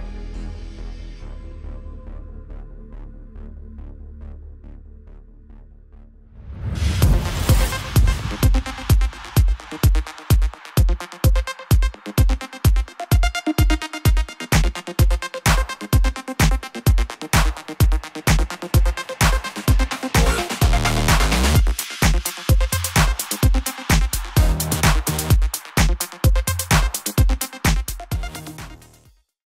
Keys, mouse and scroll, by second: 2.3 click.